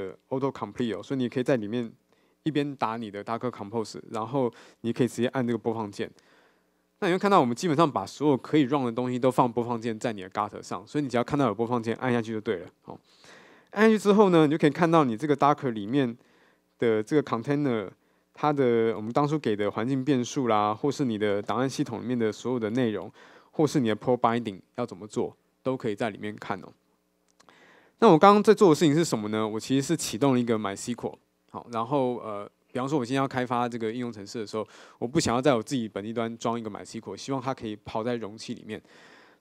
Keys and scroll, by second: 1.0 Return.